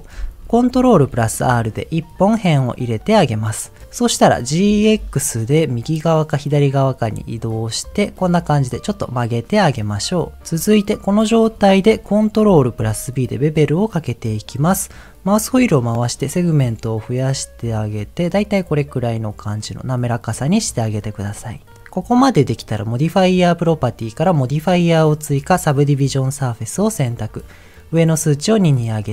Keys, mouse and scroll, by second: 0.7 ctrl+r, 2.0-3.0 right drag, 3.0 middle click, 3.8 right click, 4.2 middle click, 4.6 g, 4.9 x, 7.5 click, 7.9 middle click, 9.8 middle click, 12.7 ctrl+b, 14.5-15.2 scroll up 1, 16.6-17.7 scroll up 1, 19.9 click, 21.6 middle click, 25.8 click, 27.9 click.